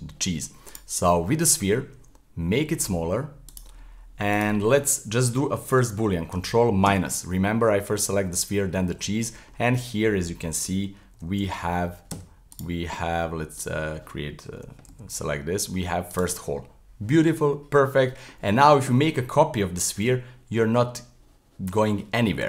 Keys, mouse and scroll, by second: 0.7 right click, 1.1-1.9 scroll up 2, 1.9 s, 4.3 shift+right click, 6.9 ctrl+KP_Subtract, 8.9-9.7 middle drag, 9.7-10.1 scroll up 1, 10.1-11.1 middle drag, 11.1 g, 12.5 right click, 13.6 click, 14.5 g, 16.4-19.4 middle drag, 19.9 shift+d.